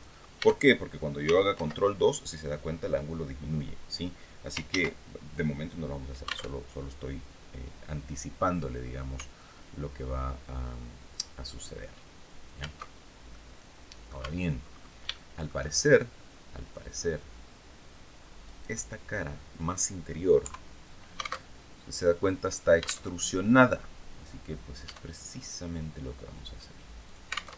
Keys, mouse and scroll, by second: 1.0 ctrl+2, 4.2 ctrl+z, 6.0 alt+Tab, 12.3 alt+Tab, 12.8 click, 13.7 Tab, 14.1-14.5 scroll up 2, 14.6 shift+click, 16.1 click, 17.9 click, 18.8-19.2 scroll down 2, 19.9 KP_3, 20.9 alt+Tab, 22.6 alt+Tab, 24.3 e, 26.5 alt+click, 27.0 alt+Tab.